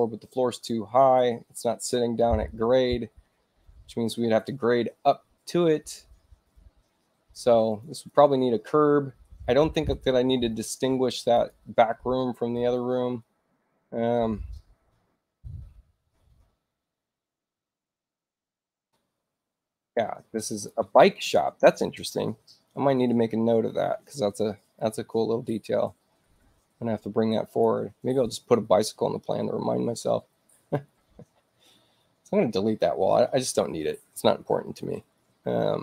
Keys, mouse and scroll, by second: 7.6 click, 7.9 click, 11.2 click, 12.9 shift+u, 15.3 click, 16.0 shift+u, 17.4 click, 18.1 shift+i, 20.4 click, 24.6 click, 25.7 space, 27.3 click.